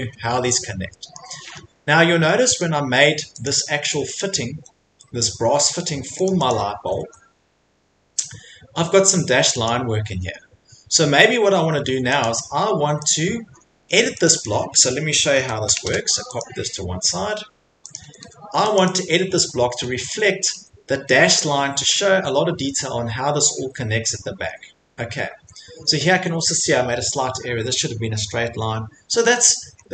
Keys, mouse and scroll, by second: 0.0 Escape, 0.4 middle click, 1.1-2.1 scroll, 2.3 middle click, 2.6 middle click, 2.8 middle click, 2.8 middle click, 3.4 click, 4.1 click, 5.7 Escape, 6.2 click, 6.5 click, 6.8 Escape, 7.0 Escape, 7.1 middle click, 7.2 middle click, 8.1 Escape, 8.2 middle click, 9.7 click, 10.1 Escape, 10.7 middle click, 11.2 middle click, 11.8 Escape, 12.2 click, 13.1 click, 13.5 Escape, 13.5 middle click, 13.7 middle click, 13.9 Escape, 14.2 click, 14.4 click, 14.8 middle click, 15.1-16.2 typing, 15.7 right click, 17.9 click, 18.0 Escape, 18.2 Escape, 18.8 click, 19.5 middle click, 19.6 middle click, 20.1 Escape, 20.3 Escape, 20.5 Escape, 23.6 middle click, 24.4 middle click, 24.5 middle click, 25.2 middle click, 25.3 middle click, 25.3 Escape, 25.7 middle click, 25.8 middle click, 26.2 middle click, 28.6 middle click, 28.7 middle click, 28.7 middle click, 29.5 middle click, 29.8 middle click, 29.8 middle click.